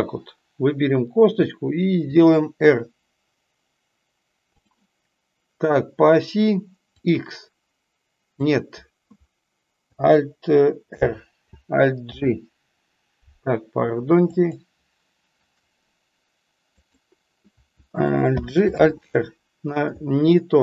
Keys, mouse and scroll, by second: 6.8-8.3 drag, 14.3 click, 16.7 click.